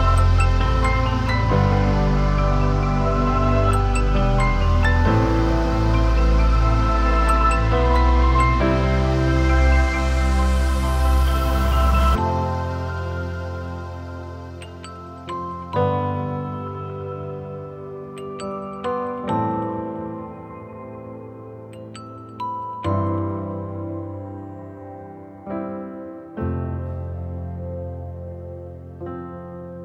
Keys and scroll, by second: 24.5 ctrl+z.